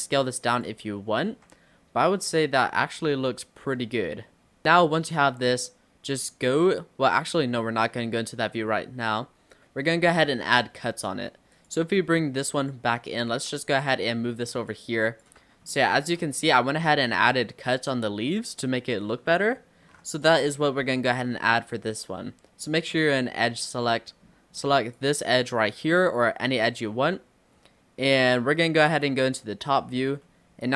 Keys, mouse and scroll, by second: 0.9 middle click, 1.3 ctrl+z, 1.6-4.8 middle drag, 6.2-9.9 middle drag, 9.9-10.8 scroll down 5, 10.8-11.5 scroll down 1, 11.6 click, 12.0 scroll down 3, 12.6 click, 13.4 Tab, 13.9 click, 14.7 click, 15.5 Tab, 15.7 middle click, 16.0 scroll up 1, 16.1 Tab, 16.5-17.1 shift+middle drag, 17.1-17.5 scroll up 1, 19.1 middle click, 19.9 scroll up 1, 20.3 click, 20.7 Tab, 20.8-21.2 scroll up 3, 21.5-22.3 scroll up 1, 22.3-22.7 scroll up 1, 22.7-25.0 middle drag, 25.0 click, 29.1 click, 29.8-30.1 scroll up 4, 30.3 shift+middle click.